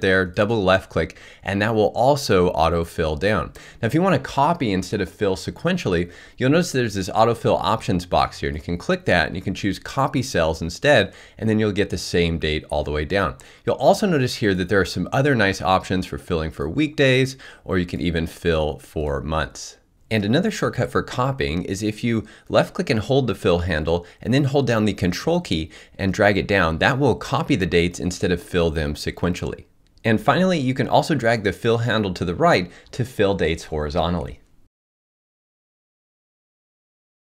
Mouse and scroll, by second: 0.0-1.3 drag, 22.2-26.9 drag.